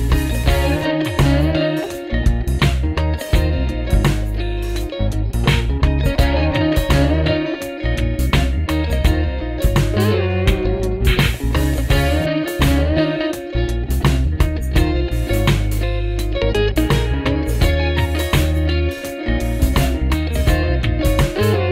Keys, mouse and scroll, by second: 0.1 ctrl+-, 5.7 alt+Tab, 7.4 double click, 7.9 alt+Tab, 13.8 shift+Down, 14.3 shift+Down, 19.9 shift+Up, 20.4 shift+Up, 20.8 shift+Up, 21.1 shift+Up.